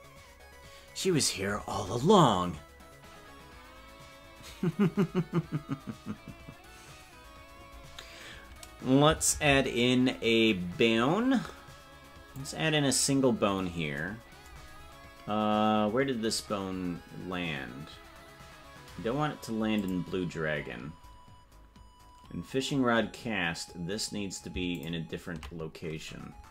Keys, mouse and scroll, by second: 16.2 scroll down 2, 18.4 scroll down 7, 19.8 click, 21.0 scroll down 1, 24.7 ctrl+click.